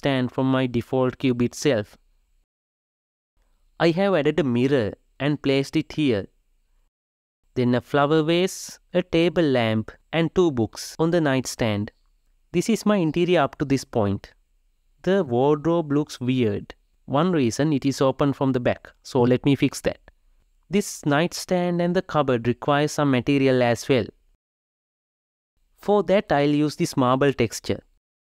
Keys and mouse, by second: 1.0-2.7 middle drag, 1.0 click, 1.4 g, 3.1 g, 5.5 g, 7.4 click, 7.6 g, 8.4 middle click, 8.5 g, 9.3 shift+middle click, 9.4 g, 10.5 middle click, 10.6 g, 12.2 KP_0, 18.5 click, 19.0 shift+click, 19.2 shift+click, 19.5 shift+click, 19.7 shift+click, 19.9 shift+click, 20.4 f, 20.5 shift+click, 21.3 shift+click, 21.7 shift+click, 22.3 shift+click, 23.1 shift+middle click, 23.9 shift+click, 25.3-26.5 middle drag, 26.5-28.2 drag.